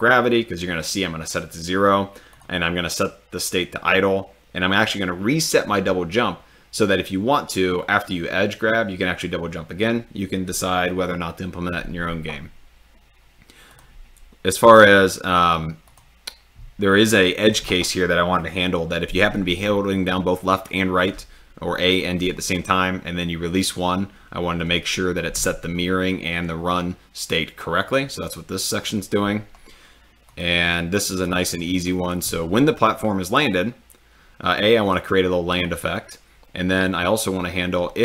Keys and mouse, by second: 2.3 click, 13.7 drag, 30.3 click, 31.8 click.